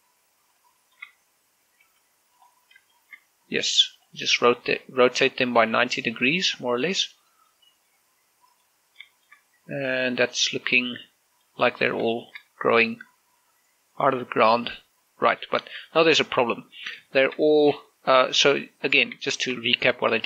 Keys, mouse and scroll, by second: 0.0-0.3 typing, 0.0 right click, 1.3 click, 1.6 shift+middle click, 1.8 shift+scroll up 1, 2.6 r, 3.2 click, 3.4 scroll up 1, 3.7 shift+middle click, 4.4 r, 4.8 click, 5.2 shift+middle click, 6.4 r, 6.8 click, 7.2 shift+middle click, 7.6 r, 8.0 click, 8.2-9.6 middle drag, 9.6 scroll down 1, 9.8 shift+middle click, 11.0 click, 11.4 middle click, 12.3 scroll up 1, 12.9 shift+middle click, 14.2 scroll up 1, 15.0 middle click, 16.4 scroll, 16.7 shift+middle click, 17.6 scroll down 1, 17.8 shift+middle click.